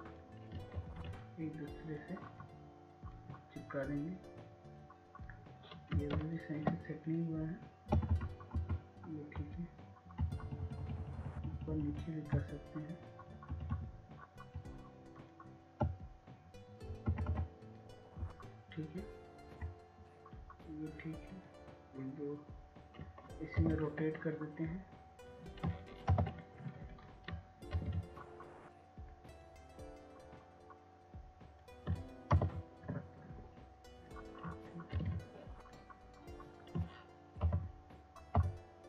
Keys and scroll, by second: 3.4 ctrl+z, 8.9 ctrl+space, 10.6 Right, 10.9 Right, 11.3 Right, 13.0 Left, 13.2 Left, 13.7 Left, 14.2 Left, 14.3 Left, 14.7 Left, 15.1-17.3 Left, 18.7 Left, 18.7-22.4 Right, 22.5 Right, 26.5 ctrl+t, 29.0 ctrl+Return, 30.7 ctrl+t, 35.3 ctrl+Return, 38.0 ctrl+Return.